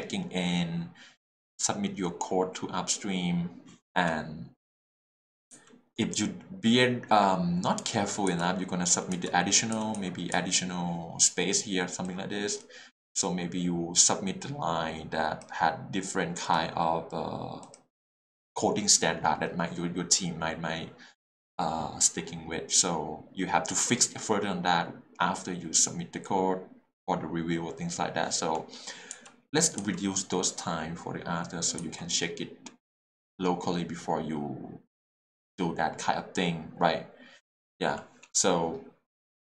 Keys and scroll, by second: 5.5 j, 8.9 k, 9.1 j, 9.9 l, 10.3 k, 29.1 j, 29.8 k, 31.8 l.